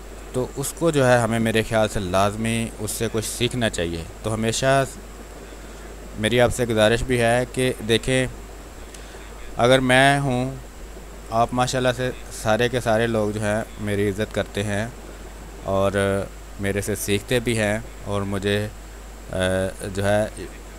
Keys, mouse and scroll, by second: 0.8 click, 1.4 ctrl+d, 2.4 click, 3.5 ctrl+space, 3.8 ctrl+click, 5.3 r, 5.7-8.6 drag, 8.6 b, 8.9 space, 9.1 ctrl+click, 9.5-13.5 drag, 13.5 space, 13.8 click, 14.0 space, 14.7 click, 15.6 space, 15.8 click, 16.1 space, 16.7-18.3 drag, 18.3-19.7 drag, 19.7 space, 20.6-20.7 drag.